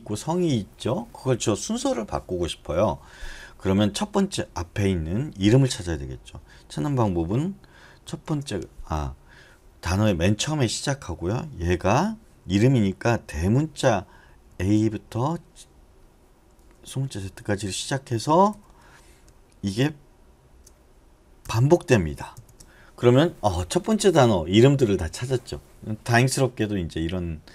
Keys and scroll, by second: 8.1 shift+6, 11.9 [, 14.5-16.5 typing, 18.5 ], 21.4-22.3 typing.